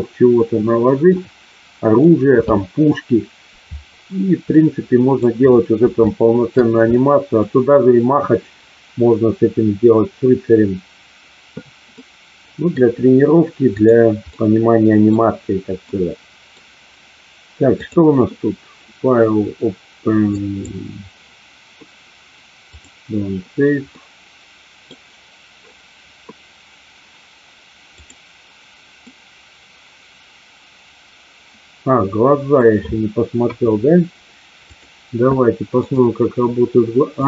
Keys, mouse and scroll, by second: 1.1-1.9 middle drag, 4.7-5.2 middle drag, 6.1-6.4 shift+middle drag, 6.8-7.3 middle drag, 11.9-12.7 middle drag, 14.3 middle click, 15.8 middle click, 17.8-22.9 drag, 23.9 middle click, 28.9-32.4 middle drag, 33.3 KP_1, 35.7 click, 37.1-37.2 drag.